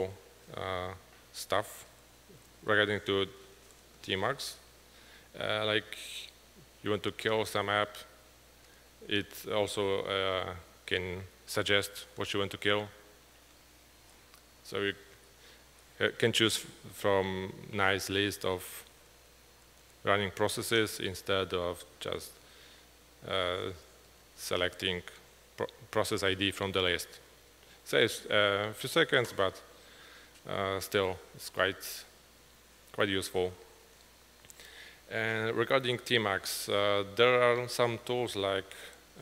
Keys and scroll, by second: 12.3 Tab, 13.6 Tab, 14.2 Down, 14.7 Down, 14.8 Down, 15.8 Down, 16.4 Page_Down, 16.8 Page_Down, 17.2 Page_Down, 17.6 Page_Down, 17.8 Page_Down, 21.0 Page_Down, 21.4-26.1 typing, 22.7 Return, 26.2 Page_Up, 27.7-28.4 typing.